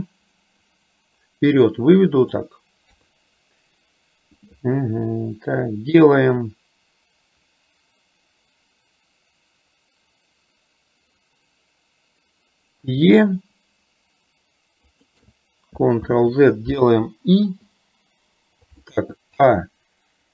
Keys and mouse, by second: 0.9-2.4 drag, 3.0 KP_3, 16.1 ctrl+z, 17.5 i.